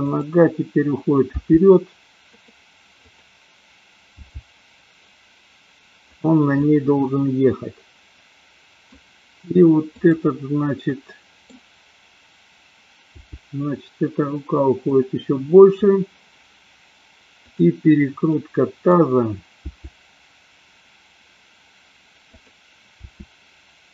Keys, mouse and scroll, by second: 0.0 click, 1.3 g, 3.0-3.8 drag, 4.4 g, 6.6-9.0 middle drag, 10.0 click, 10.9 middle click, 13.1 g, 17.4 click, 18.4-18.9 middle drag, 19.8 g, 22.5 click, 23.0 r.